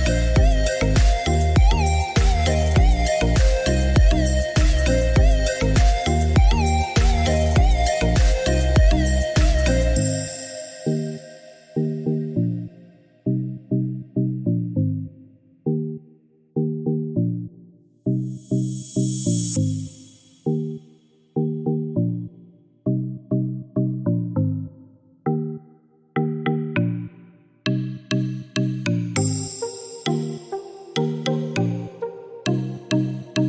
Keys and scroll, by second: 2.0 6, 2.3 Return, 6.0 3, 6.3 1, 6.7 Return, 13.4 8, 13.7 Return.